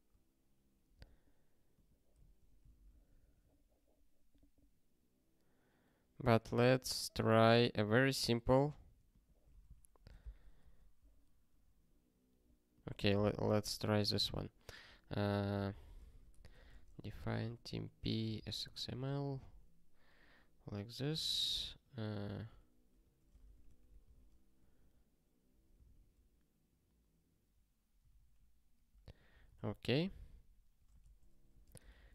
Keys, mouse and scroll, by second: 1.7 click, 2.3 ctrl+f, 2.7 ctrl+p, 14.0 super+o, 14.8 ctrl+n, 15.2 ctrl+p, 15.4 ctrl+p, 15.7 Return, 15.8-19.2 typing, 19.3 ctrl+y, 21.1 ctrl+=, 22.5 ', 23.4 ctrl+alt+@, 23.6 Tab, 24.1 ctrl+s, 24.8 ctrl+b, 26.3 ctrl+s, 27.9 ctrl+n, 28.1 ctrl+n, 28.7 ctrl+p, 29.1 ctrl+n, 29.3 ctrl+e, 30.0 ctrl+n, 30.1 ctrl+n, 31.0 alt+f, 31.4 alt+d, 31.5-32.1 typing.